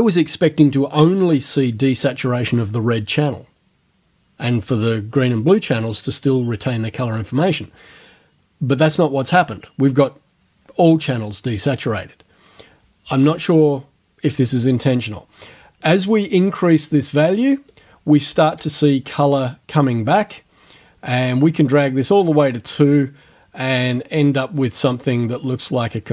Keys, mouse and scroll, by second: 16.2-17.9 drag, 19.2-24.8 drag.